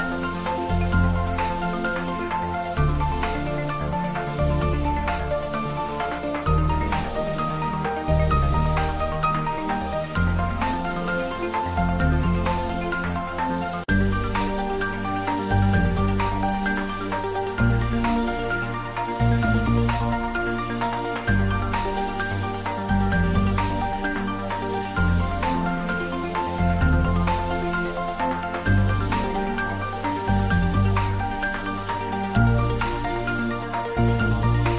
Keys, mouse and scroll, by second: 0.7 shift+a, 2.5 click, 4.4 s, 5.1 click, 6.5 ctrl+z, 7.0 click, 8.1 f, 8.6 y, 9.2 click, 9.9 g, 11.7 click, 12.0 r, 12.9 click, 13.7 s, 14.5 click, 15.8 s, 16.7 click, 17.2 ctrl+middle click, 18.1 s, 18.5 click, 18.9 g, 20.5 z, 21.0 click, 21.3 s, 22.1 click, 23.7 r, 24.0 click, 24.6 g, 25.3 y, 26.0 click, 26.2 shift+middle click, 26.8 `, 27.1 3, 27.6-29.4 ctrl+middle drag, 29.4 r, 30.7 click, 31.3 g, 33.3 click, 33.4 r, 34.5 click.